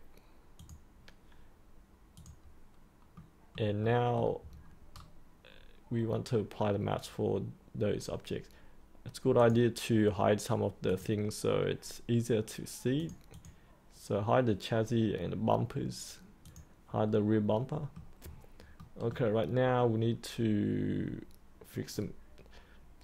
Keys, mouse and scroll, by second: 3.1 middle click, 4.4-7.6 scroll up 1, 9.3 click, 17.4 middle click, 18.2 scroll up 1, 18.7 middle click.